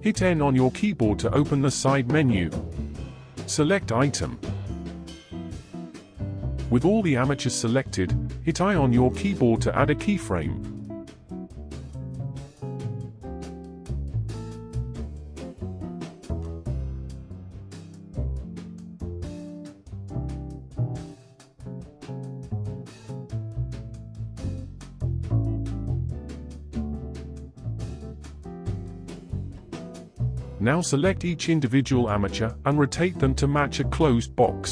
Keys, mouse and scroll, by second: 1.8 n, 4.4 click, 15.2-17.9 drag, 17.9 ctrl+z, 18.8-20.2 middle drag, 20.2 click, 20.8-25.3 shift+middle drag, 25.3-25.7 scroll down 2, 25.7-30.5 middle drag, 30.5 scroll up 2, 31.0-32.4 middle drag, 32.4 r.